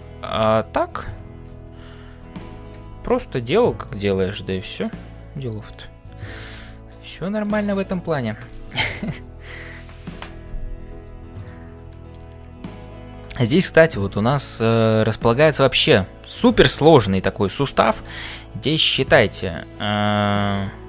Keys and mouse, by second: 0.0-20.8 typing, 0.9 shift+click, 3.8-4.9 middle drag, 5.7 middle click, 6.6 shift+middle click, 7.3 click, 9.7 click, 14.3 shift+middle click, 17.7 shift+middle click.